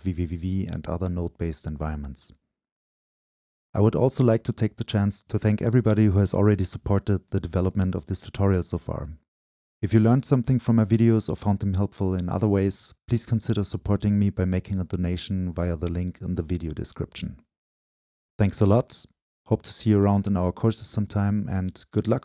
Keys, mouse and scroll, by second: 0.0-2.7 scroll down 2, 2.7-5.5 scroll down 1, 5.5-6.5 scroll down 1, 6.5-8.7 drag, 11.1 click, 16.9-19.7 scroll up 2, 21.0 click, 21.9 space.